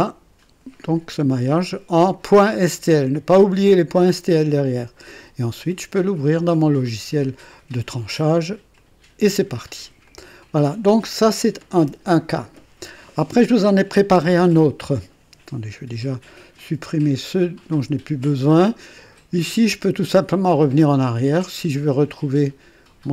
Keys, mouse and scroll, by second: 8.7 click, 10.0 click, 16.5 click, 17.7 Delete, 20.0 click, 20.5 click, 21.0 click.